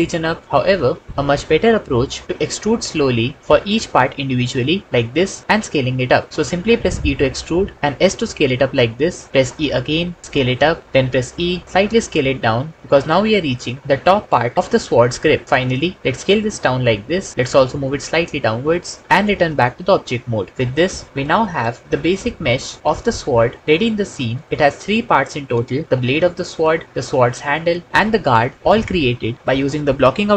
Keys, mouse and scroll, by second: 0.6 ctrl+z, 2.2 e, 3.3 click, 3.4 s, 5.4 e, 7.8 s, 9.3 e, 10.2 s, 10.8 e, 11.6 s, 12.8 e, 13.8 s, 14.5 e, 16.1 s, 17.3 g, 17.7 z, 19.1 Tab, 19.7 alt+z, 21.9 h.